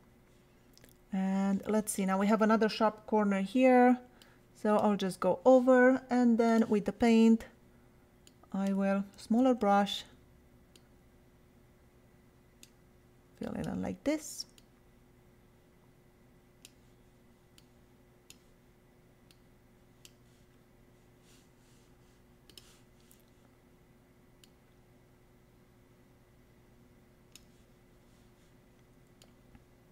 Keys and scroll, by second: 9.2 [.